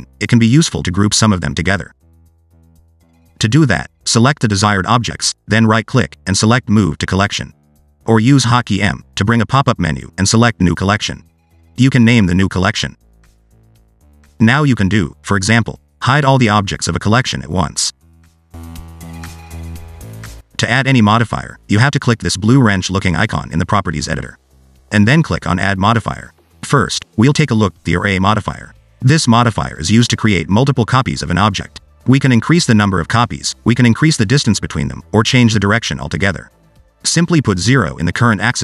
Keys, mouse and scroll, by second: 0.4 scroll down 2, 1.0 shift+click, 1.2 shift+click, 1.5 shift+d, 2.1 scroll down 1, 2.4 s, 2.8 scroll up 1, 3.4 click, 5.0 click, 5.4 shift+click, 5.7 shift+click, 6.4 right click, 8.6 m, 13.1 l, 14.2 click, 15.3 click, 15.7 click, 17.4 click, 18.3 click, 20.3 click, 21.3 Tab, 24.6 click, 27.3 click, 31.9 click, 32.2 click, 32.4 click, 34.1 click, 37.2 click.